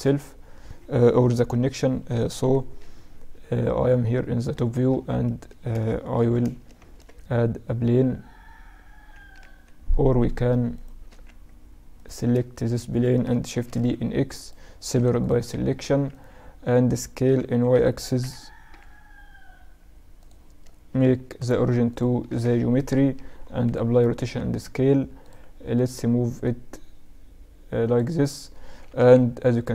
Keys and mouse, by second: 2.5 KP_7, 4.0-4.3 middle drag, 6.2 shift+c, 6.9 shift+a, 10.8 right click, 11.2 Tab, 12.1-14.3 right drag, 13.7 shift+d, 15.0 p, 15.9 Tab, 16.2-18.2 drag, 17.3 s, 21.4 ctrl+alt+shift+c, 23.4 ctrl+a, 24.3 Tab, 25.3-29.1 drag, 25.8-27.7 right drag, 29.1 KP_1.